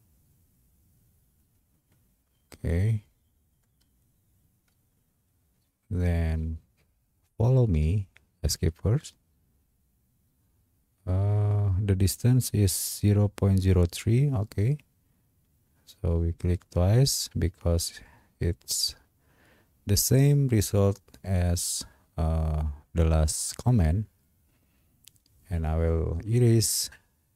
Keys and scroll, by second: 8.6 Escape.